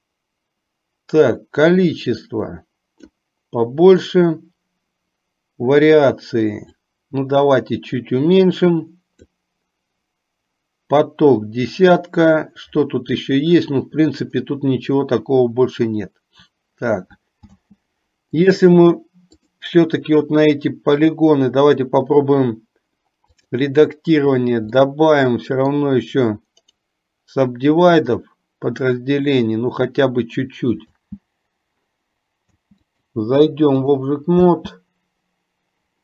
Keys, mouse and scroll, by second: 2.0-3.3 drag, 7.1-9.6 drag, 17.7 space, 18.6 click, 19.6 click, 21.1-23.8 drag, 25.1-26.1 middle drag, 27.0-28.5 right drag, 31.2 space, 33.1-34.2 drag, 33.1 space, 34.7 space.